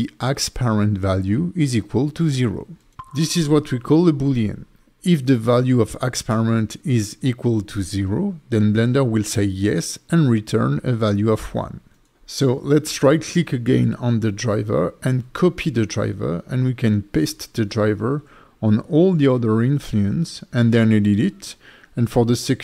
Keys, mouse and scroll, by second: 0.2 =, 12.1 right click, 16.6 right click, 18.5 right click, 19.5 right click, 20.9 right click, 22.4 click.